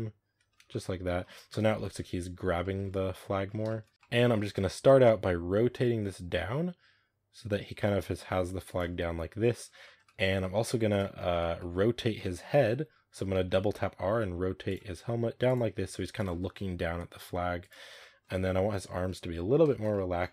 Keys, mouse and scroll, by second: 0.4 scroll down 2, 0.5 a, 0.6-1.3 middle drag, 1.3 KP_0, 2.3-3.3 scroll up 6, 2.5 shift+middle drag, 3.3-3.9 scroll down 5, 3.5 shift+middle drag, 3.7 middle click, 3.9-5.0 shift+middle drag, 5.0 r, 8.8-9.6 middle drag, 9.6 scroll down 1, 9.7-10.8 shift+middle drag, 10.8 right click, 11.0 shift+middle drag, 11.2 shift+scroll up 3, 11.4 middle click, 12.0 KP_0, 13.2 r, 14.8 r, 15.5 r, 17.1 r, 17.8-18.6 shift+middle drag, 18.6 right click, 18.9-19.7 middle drag, 19.7-20.3 scroll up 3, 19.8-20.1 middle drag.